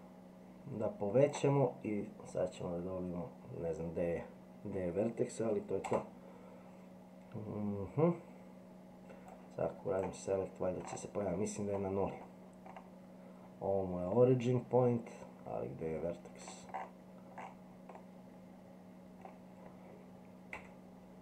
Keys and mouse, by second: 9.3 click, 14.1-16.4 middle drag, 17.9-19.2 middle drag, 20.5 e.